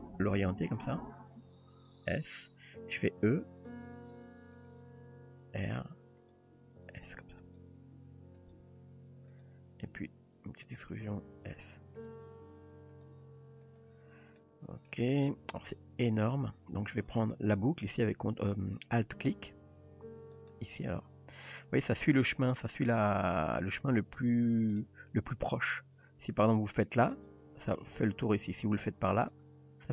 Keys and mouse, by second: 0.1 g, 2.4 s, 3.4 e, 5.0 r, 5.7 g, 6.6 s, 8.0 s, 8.6 g, 10.0 e, 10.9 s, 12.3 r, 13.7 g, 14.4-14.9 middle drag, 15.3-16.1 middle drag, 19.3 alt+click, 20.3 alt+click, 21.5 alt+click, 22.4 middle click, 24.8 middle click, 27.1 alt+click, 29.3 alt+click.